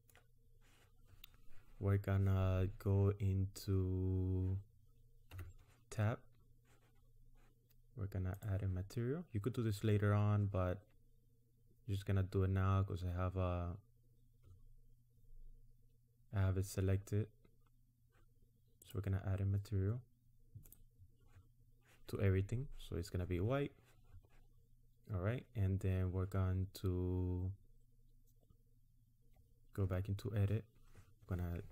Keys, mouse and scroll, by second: 5.3 Tab, 8.4 click, 18.8 click, 20.7 click, 29.9 Tab.